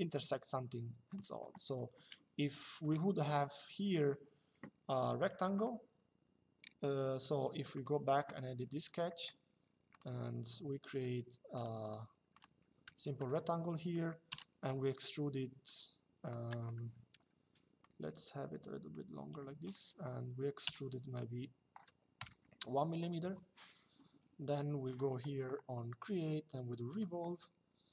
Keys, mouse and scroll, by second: 0.8 click, 3.6 middle click, 5.2 middle click, 7.3 click, 8.8 middle click, 11.3 click, 12.6 Escape, 13.0 click, 13.6 middle click, 14.0 e, 16.7 Escape, 17.5 click, 19.3 click, 20.4 e, 21.9 KP_1, 24.6 click, 26.6 click.